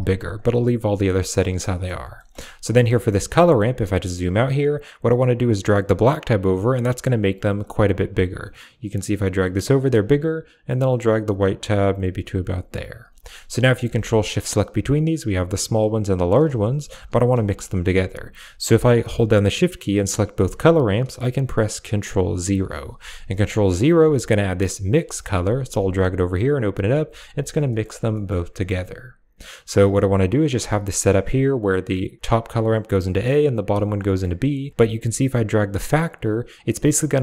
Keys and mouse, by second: 1.5 middle click, 2.0 middle click, 2.6 middle click, 5.4-6.8 drag, 8.2-9.6 drag, 11.8 click, 13.1 middle click, 13.5 middle click, 15.0 ctrl+shift+click, 16.1 ctrl+shift+click, 16.4 click, 16.8 g, 17.1 click, 17.2 a, 18.6 click, 19.6 shift+click, 22.3 ctrl+0, 23.2 middle click, 23.8 g, 24.8 click, 25.5-26.2 typing, 25.7 click, 26.2 click, 26.6 click, 29.3 click, 29.6 middle click, 33.9 middle click, 34.8-36.9 drag.